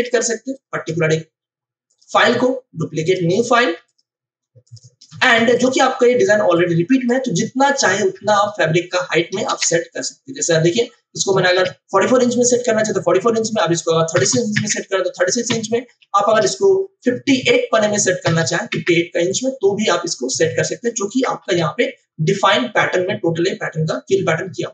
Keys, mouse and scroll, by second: 0.5 right click, 1.8 click, 5.0 space, 5.5 ctrl+alt+click, 6.5-8.3 drag, 9.5 ctrl+BackSpace, 11.4 ctrl+alt+c, 13.3 click, 14.5 Return, 16.3 ctrl+alt+c, 17.5 click, 18.7 Return, 20.4 click, 21.4 ctrl+BackSpace.